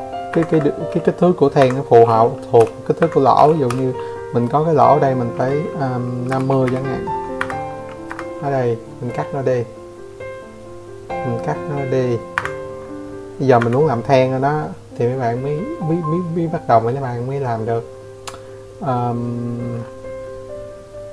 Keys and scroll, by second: 0.1 n, 0.5 Escape, 1.2 m, 3.8 5, 4.9 Escape, 4.9 typing, 5.6 Escape, 9.9 Escape, 11.1 Escape.